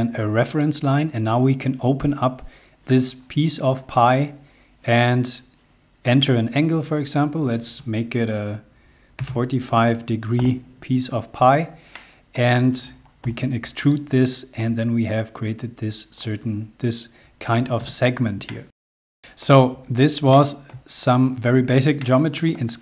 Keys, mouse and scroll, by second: 0.2 click, 8.9 typing, 10.0 Return, 11.1 scroll down 1, 11.5 middle click, 12.8 p, 13.4 click, 14.7 scroll down 1, 15.7 click, 17.4 space, 18.1 shift+middle click, 18.9-19.5 scroll down 2, 19.1 middle click, 19.3 shift+middle click, 19.9 shift+middle click.